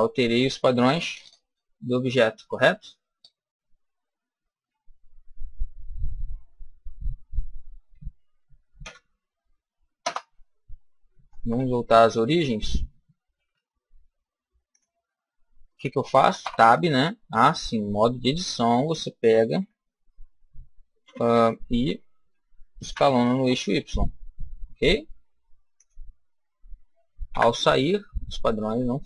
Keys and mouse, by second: 1.0 ctrl+z, 2.4 ctrl+z, 4.3 ctrl+z, 6.2 ctrl+y, 6.8 ctrl+y, 8.7 Delete, 11.2 shift+s, 13.3 shift+a, 16.3 Tab, 17.3-19.2 middle drag, 19.5 KP_1, 20.9 KP_7, 22.8 s, 25.7 click, 27.2 Tab.